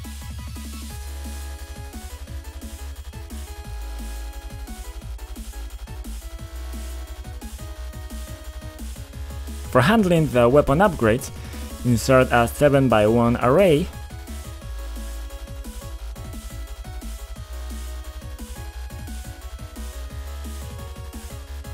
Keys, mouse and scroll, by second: 0.6 F5, 1.8 click, 2.1-3.0 typing, 4.3-6.6 typing, 7.3 click, 8.3 click, 10.2 click, 10.9 right click, 11.5 click, 12.3 click, 12.9 click, 15.5-16.8 typing, 17.3 Return, 18.3 scroll down 1, 21.2 click.